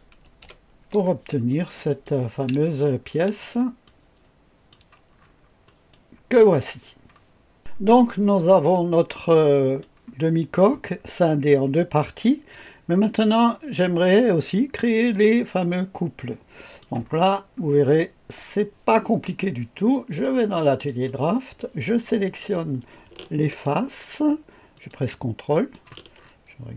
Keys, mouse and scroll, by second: 0.2 v, 0.4 KP_1, 1.0-1.9 scroll up 1, 1.9 click, 2.2 click, 2.6-3.8 scroll down 1, 3.8-4.8 drag, 5.1-6.1 scroll up 1, 5.6 middle click, 7.9-8.2 scroll up 1, 8.2-9.4 scroll down 1, 9.4 right click, 10.1-11.9 drag, 12.5-14.8 drag, 15.1-16.8 drag, 17.3-18.3 scroll up 2, 17.8 right click, 20.0 click, 21.0 click, 22.3 click, 23.4 ctrl+click, 24.7 ctrl+click, 25.5 ctrl+click, 26.1-26.7 scroll up 2.